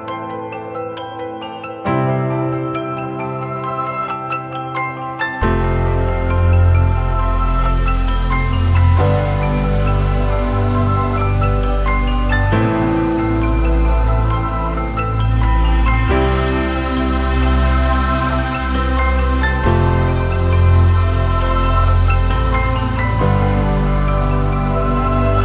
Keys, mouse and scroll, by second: 8.6-11.1 scroll up 1, 22.4-23.5 scroll down 1, 23.5 double click.